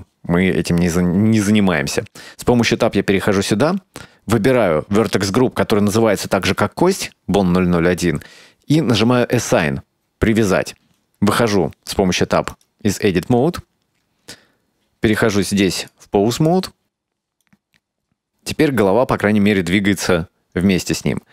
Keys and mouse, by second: 2.0 Tab, 4.4 click, 9.5 click, 11.2 Tab, 12.6 right click, 15.2 click, 15.9-16.5 drag, 17.5-21.3 right drag.